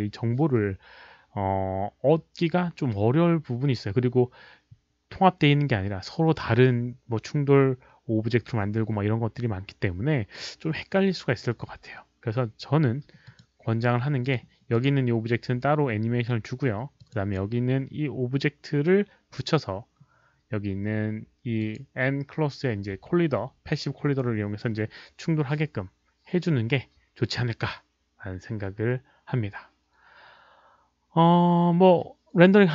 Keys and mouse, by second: 13.2 click, 14.2 click, 14.7 click, 16.9 click, 21.5 click.